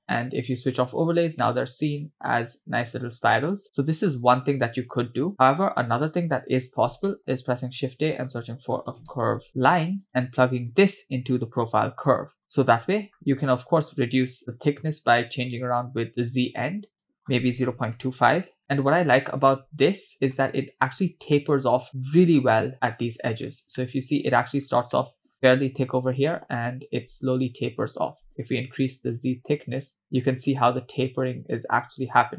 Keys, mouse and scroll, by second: 0.7 click, 1.4-2.1 middle drag, 2.4-3.6 scroll down 2, 3.6-4.9 scroll up 6, 7.1 middle click, 7.5 shift+a, 10.1-10.7 scroll down 1, 10.7-12.4 drag, 12.4 middle click, 13.1-13.5 scroll up 2, 13.9-17.1 shift+drag, 17.1-18.6 shift+drag, 19.1 scroll down 2, 19.5-20.4 shift+middle drag, 20.7-21.2 scroll up 3, 21.4-21.8 shift+middle drag, 23.3 scroll down 2, 23.8-24.3 shift+middle drag, 24.6 scroll up 2, 25.0-25.3 shift+middle drag, 26.3-28.1 shift+middle drag, 29.2-31.3 shift+drag.